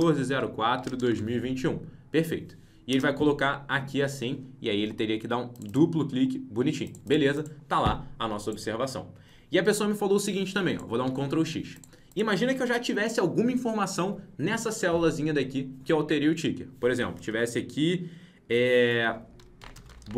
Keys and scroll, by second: 11.0 ctrl+x.